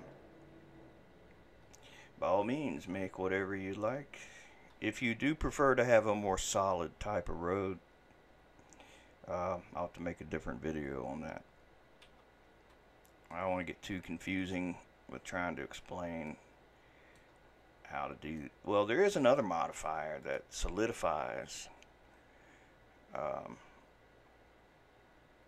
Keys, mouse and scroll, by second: 13.3-14.8 middle drag, 14.8-15.8 scroll up 2, 15.8-16.3 scroll down 1, 16.3-17.5 shift+middle drag, 17.5-18.4 scroll up 1, 18.4-20.3 shift+middle drag, 20.3-25.4 drag.